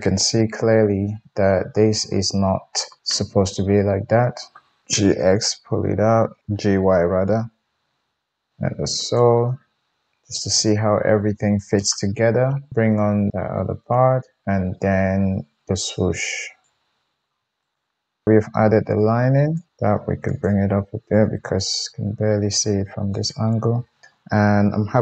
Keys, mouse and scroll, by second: 4.8 g, 7.2-9.0 middle drag, 9.0 click, 9.2-16.2 middle drag, 16.2 click, 16.7-17.3 middle drag, 17.3 shift+KP_1, 17.6 click, 19.5 click, 19.7 Tab, 20.2 click, 21.4-24.1 middle drag, 21.7 g, 24.6 KP_1.